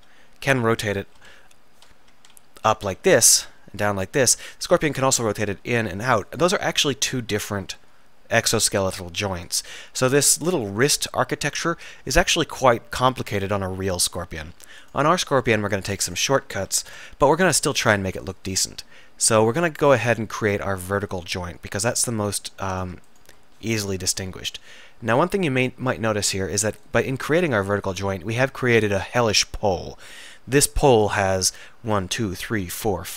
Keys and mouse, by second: 0.0 z, 1.2 KP_1, 2.3 KP_3, 2.9 r, 4.4-5.7 drag, 5.5 r, 8.6 middle click, 14.9-18.6 drag, 16.9 alt+m, 18.6 alt+m, 19.0-20.0 drag, 20.1 middle click, 24.0 alt+m, 27.8-33.1 middle drag.